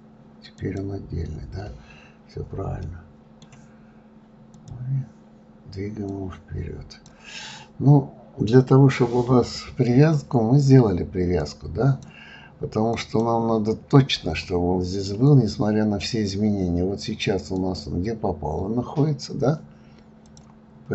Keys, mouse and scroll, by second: 2.8-4.5 middle drag, 4.5 click, 6.1 click, 7.3-10.3 middle drag, 11.4 click, 12.9 click, 14.4-17.5 middle drag, 17.5 click, 20.2 click.